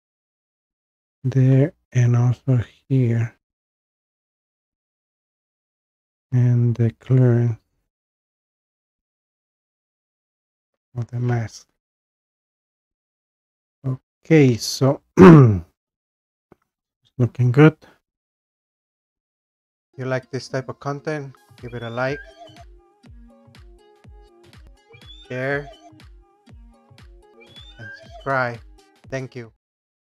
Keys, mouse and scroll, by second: 2.0-2.4 scroll down 2, 2.5 scroll up 1, 3.0-3.8 scroll down 1, 3.9-4.9 scroll down 1, 5.3-6.8 scroll up 3, 16.2-17.8 scroll down 1.